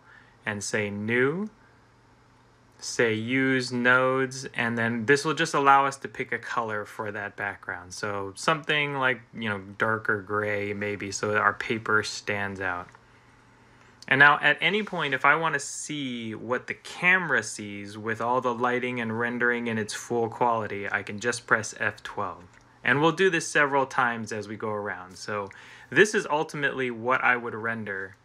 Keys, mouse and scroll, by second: 14.5 click, 22.2 F12.